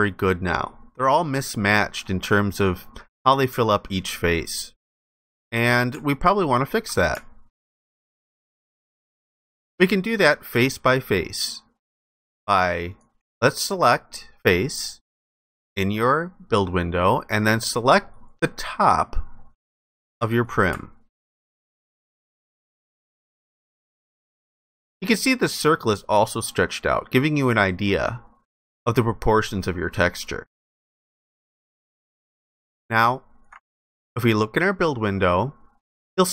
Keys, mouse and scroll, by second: 6.1 ctrl+alt+click, 7.3 ctrl+alt+click, 20.5 alt+click, 22.7 alt+click, 31.3 alt+click, 32.9 ctrl+alt+click.